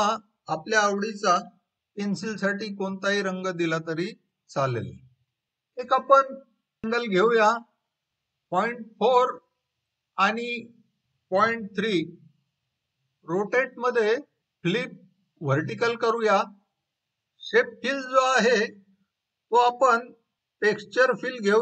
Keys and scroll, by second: 8.5-9.3 typing, 11.9-12.7 typing.